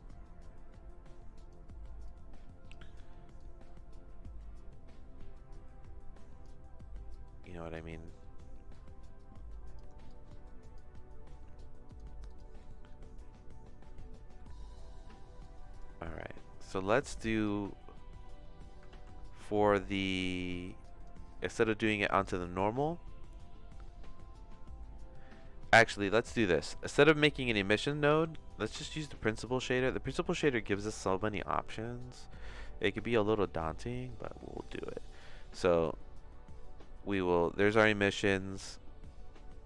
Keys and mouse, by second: 2.0 click, 3.3-6.4 drag, 7.1 click, 8.7-9.7 drag, 10.1 click, 11.8 click, 12.2 click, 14.5 middle click, 15.4 click, 16.8 click, 18.9 ctrl+z, 20.6 middle click, 21.0 click, 21.7 click, 22.7 middle click, 26.5 middle click, 27.5 click, 27.8 x, 28.1 shift+a, 34.1 click, 36.3 middle click, 36.9 middle click, 38.4 middle click.